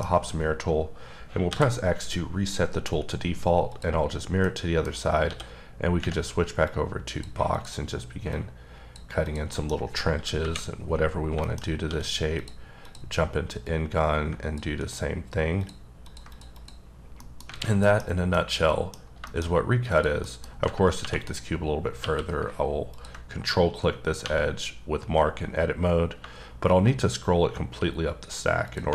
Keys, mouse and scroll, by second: 1.5 x, 3.7 click, 4.0-4.4 scroll up 3, 4.4 middle click, 4.9 scroll up 2, 5.2 d, 6.6 click, 7.5 click, 8.3 click, 9.2 click, 9.5 middle click, 10.4 KP_1, 11.0-11.3 scroll up 3, 11.4 shift+middle click, 11.8 d, 12.4 click, 12.8 click, 13.1-13.6 scroll down 3, 13.6 click, 16.0 ctrl+double click, 16.3 ctrl+click, 16.5 click, 16.9-17.5 scroll down 4, 17.2 middle click, 17.5 alt+a, 17.8 middle click, 18.0 scroll down 3, 18.3 middle click, 19.0 scroll down 2, 19.3 shift+middle click, 19.9 click, 20.2 middle click, 21.0 2, 21.2 click, 22.0 q, 22.9 ctrl+click, 23.8-24.2 scroll up 6, 24.2 1, 26.4-27.9 scroll up 10, 28.7 click.